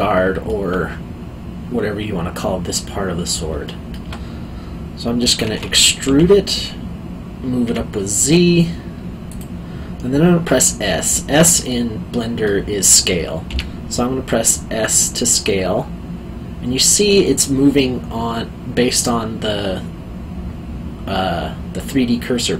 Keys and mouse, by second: 3.6 alt+middle click, 6.0 e, 7.6 z, 9.3 click, 10.4 middle click, 13.5 s.